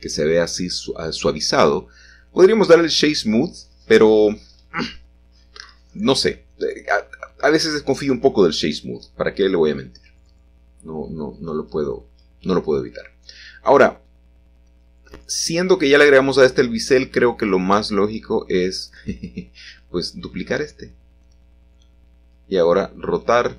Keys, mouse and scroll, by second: 0.0 right click, 0.6 click, 1.5 scroll up 1, 1.6-2.4 scroll down 1, 2.4 ctrl+z, 3.1 scroll down 2, 3.6 scroll up 3, 4.5 click, 5.3 click, 5.6 Tab, 8.1 l, 9.2 l, 9.8 l, 10.5 l, 15.6-16.6 scroll down 1, 17.0-18.1 shift+middle drag, 18.1 shift+d, 18.8 Escape, 21.0 z, 21.2 9, 21.4 0, 22.5 Return.